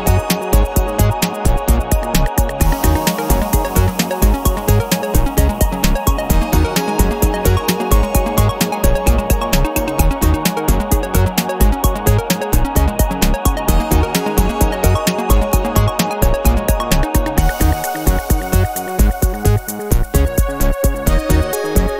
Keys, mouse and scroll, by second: 0.2 scroll up 1, 0.6-2.2 drag, 2.2 middle click, 2.4-4.0 drag, 4.0-5.1 middle drag, 4.3 0, 5.1 scroll down 1, 5.3 middle click, 5.6-6.2 scroll up 1, 6.2 scroll down 1, 6.4-7.3 scroll up 1, 7.3 click, 8.2 click, 8.9 ctrl+click, 9.4 ctrl+click, 11.2 click, 12.6 click, 13.1-13.5 scroll down 2, 13.6-13.9 scroll up 2, 14.0-15.7 middle drag, 15.6 0, 16.0 scroll down 1, 16.5 scroll up 1, 18.0 click, 18.5 space, 20.5 click, 21.2 space, 21.7 click.